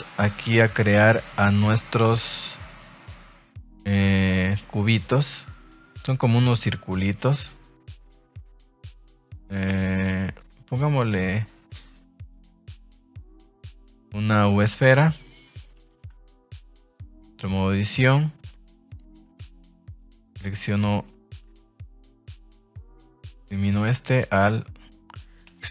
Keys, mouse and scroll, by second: 0.7 KP_1, 1.4 shift+middle drag, 2.4 shift+a, 16.5 shift+middle click, 16.9 Tab, 17.2 z, 18.8 click, 19.3 a, 19.5 a, 24.1 right click.